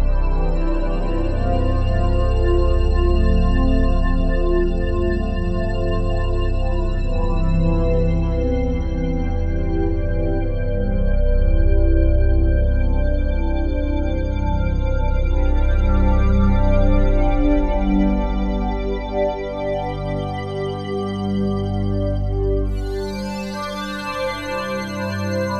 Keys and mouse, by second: 0.0 click, 2.1 click, 3.4 typing, 3.4 Return, 5.5 click, 9.9-11.2 alt+drag, 11.8 alt+click, 13.3 click, 14.2 click, 15.2 click, 15.8 click, 18.1 click, 18.4 click, 19.2 click, 20.3 click, 21.3 KP_5, 21.3 KP_0, 21.7 Return, 23.0 F12.